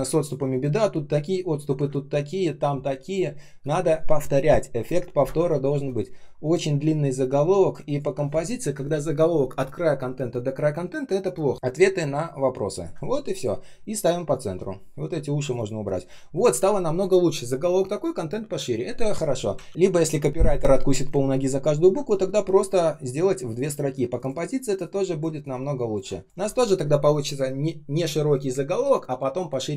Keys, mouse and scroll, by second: 1.8 space, 2.3 space, 2.3 space, 5.2 space, 5.7 space, 7.8 ctrl+click, 12.8 Delete, 19.6 ctrl+z.